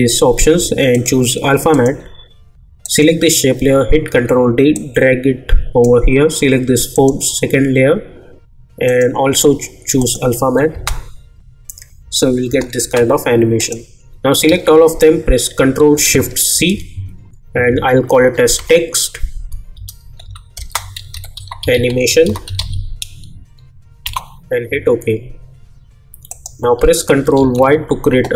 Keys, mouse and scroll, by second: 0.9 click, 4.1 ctrl+d, 4.7-6.9 drag, 10.7 space, 13.6 click, 14.4 ctrl+a, 16.5 ctrl+shift+c, 17.9-23.0 typing, 24.0 Return, 26.3 click, 27.3 ctrl+y.